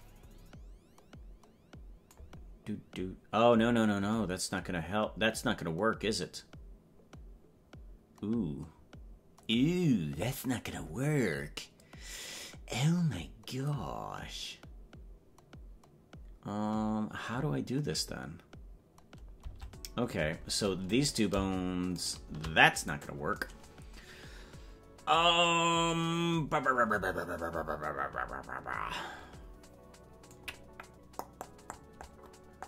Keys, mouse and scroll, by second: 22.1 right click, 23.0 right click.